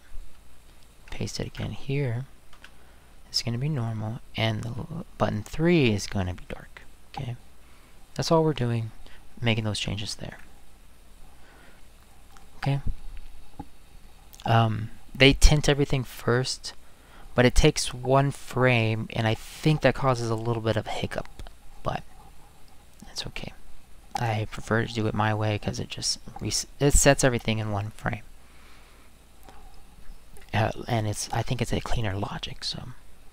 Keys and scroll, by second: 1.4 ctrl+v, 2.5 space, 4.7 space.